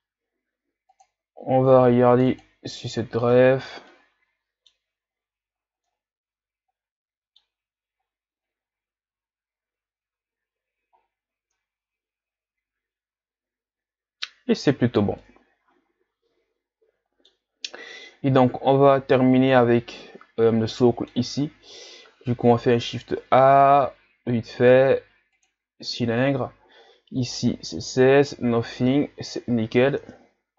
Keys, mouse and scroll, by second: 0.9 click, 2.4 click, 3.9-5.1 middle drag, 5.1 scroll up 5, 5.8-8.1 middle drag, 8.1-10.2 scroll up 1, 10.2-11.0 scroll up 1, 11.0-11.5 scroll down 4, 11.5-14.6 middle drag, 15.2-18.2 middle drag, 18.6-19.4 scroll down 2, 20.8-22.0 middle drag, 22.0 shift+a, 29.0-30.0 scroll down 3, 30.0 Tab.